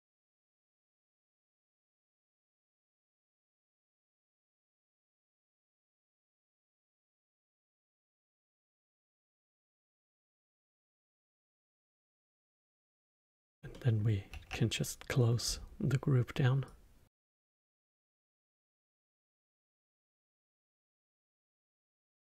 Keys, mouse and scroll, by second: 0.8-1.6 scroll up 3, 1.6-3.3 middle drag, 3.7 click, 3.9-4.2 scroll up 8, 4.2 click, 5.6 click, 6.9 middle drag, 7.1 scroll up 4, 7.5 middle drag, 7.6 scroll up 1, 7.9-8.5 drag, 8.7 drag, 9.1 middle click, 10.0 click, 10.5-13.5 middle drag, 13.7 middle click, 14.3 Tab, 15.0 middle click, 15.4-16.6 scroll down 3, 16.6-18.0 drag, 18.0-18.4 scroll down 7, 18.4-20.5 middle drag, 20.5-21.5 scroll up 6, 21.5 click, 22.0 click.